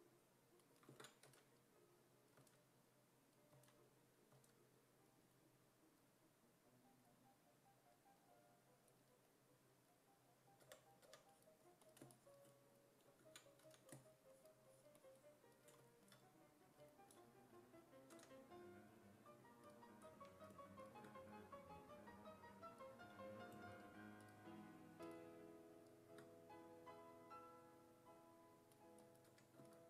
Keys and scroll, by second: 1.3 s, 2.4 s, 3.6 s, 4.4 s, 10.7 4, 11.1 4, 13.2 ctrl+z, 13.6 s, 18.2 w, 29.3 1.